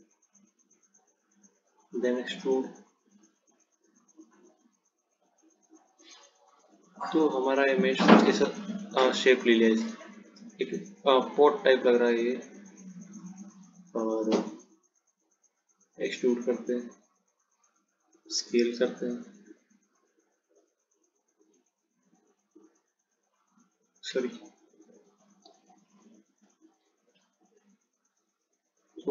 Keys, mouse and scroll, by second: 3.3 click, 6.9 click, 13.5 scroll down 1, 16.1 click, 18.3 s, 27.3 ctrl+z.